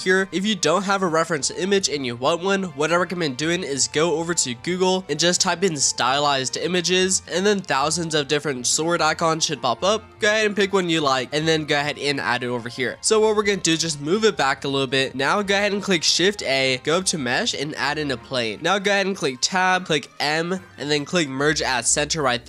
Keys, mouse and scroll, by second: 0.3-0.7 scroll up 1, 0.7-6.5 middle drag, 7.2-8.5 middle drag, 10.3 click, 10.9-11.6 middle drag, 11.6 scroll up 1, 11.8-13.2 middle drag, 13.2 click, 14.5 click, 14.8-16.2 middle drag, 16.2 shift+a, 19.5 Tab, 20.1 m.